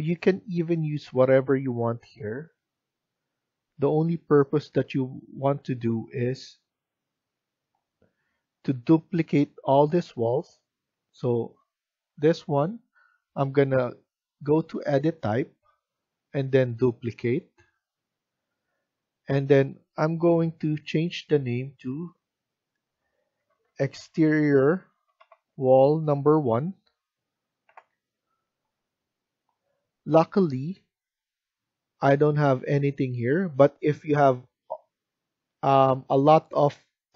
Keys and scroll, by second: 22.8 Caps_Lock, 23.1-25.6 typing, 32.0 1.